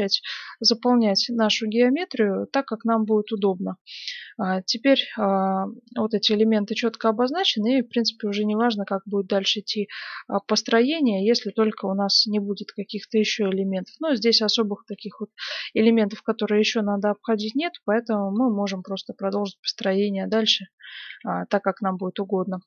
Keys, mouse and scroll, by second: 0.4 g, 6.8 right click, 7.9-9.5 middle drag, 8.5 e, 10.9 right click, 11.5 f, 12.4 g, 13.1-17.9 middle drag, 18.3 middle click, 18.8-21.6 right drag, 20.4 f, 21.1 g.